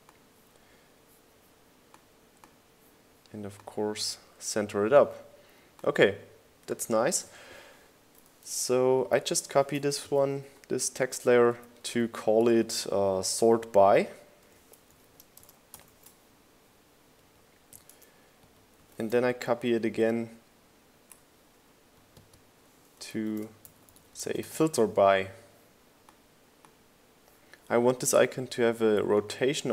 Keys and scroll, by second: 10.7 super+v, 11.1 Down, 11.1 Left, 11.6 Left, 12.3 shift+Up, 12.7 shift+Left, 13.4 Up, 13.5 Left, 14.6 Up, 15.8-17.6 typing, 20.2 super+v, 20.5 shift+Right, 24.6 super+a, 24.7-26.4 typing.